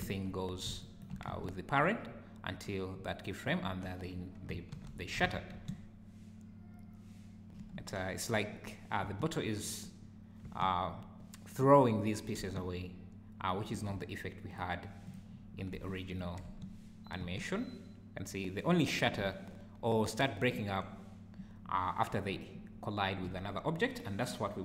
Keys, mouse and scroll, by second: 0.0 right click, 0.8 shift+right click, 1.3 space, 4.5 alt+Escape, 4.7 alt+h, 5.3 alt+a, 5.5 space, 7.8 Escape, 9.0 space, 10.5 space, 12.4 space, 13.6 Escape.